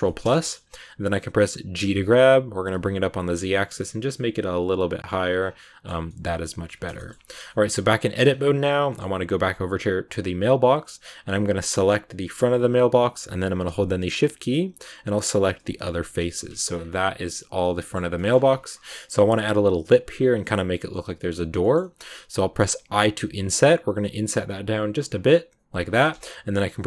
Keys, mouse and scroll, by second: 0.1 scroll down 1, 0.3-1.8 middle drag, 1.8 g, 5.3 scroll down 2, 5.5 middle click, 5.9 scroll down 1, 6.0 middle click, 6.6 Tab, 6.9 shift+middle click, 7.0-7.4 scroll up 1, 7.4 middle click, 8.2-8.8 scroll up 2, 8.8 middle click, 9.3 a, 11.6 right click, 14.4 shift+right click, 15.2 shift+right click, 16.2 KP_Decimal, 16.6 scroll down 2, 16.8-18.2 middle drag, 18.2-18.6 scroll up 2, 18.6-21.4 middle drag, 21.4-22.6 scroll up 2, 21.5 middle click, 22.6 i, 25.9 scroll up 1, 25.9-26.8 middle drag.